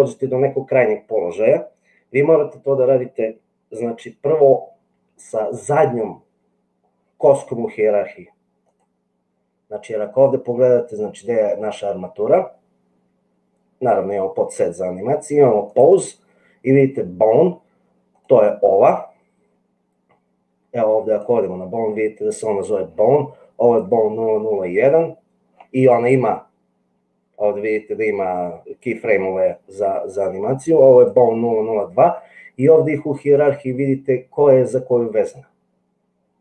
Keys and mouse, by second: 18.0 click, 30.9 click.